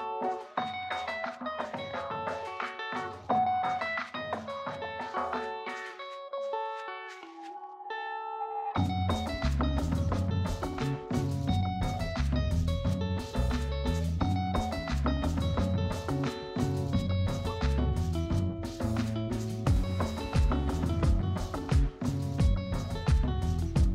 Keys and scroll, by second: 2.7 ctrl+=, 3.9 space.